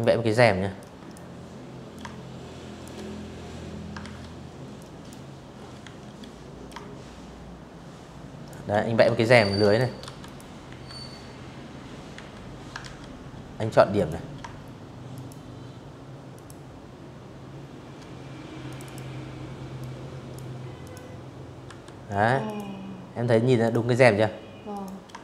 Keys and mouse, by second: 1.7 ctrl+z, 2.4 click, 3.5 s, 4.3-6.1 shift+drag, 6.7-8.3 typing, 6.9 click, 7.2 click, 7.9 click, 9.8 a, 10.5 ctrl+z, 11.2 a, 11.6 click, 12.8 shift+click, 14.0 shift+click, 16.3 click, 16.5 click, 17.4 click, 18.5 click, 19.3 v, 20.1 click, 21.3 click, 22.3 click, 23.6 shift+click, 25.1 shift+click.